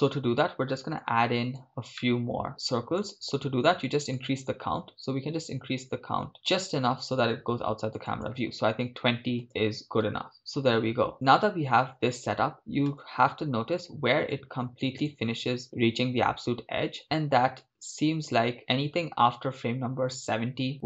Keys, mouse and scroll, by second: 1.0 scroll down 3, 1.0-10.0 drag, 10.0 shift+space, 11.1 shift+space, 14.3-20.8 drag.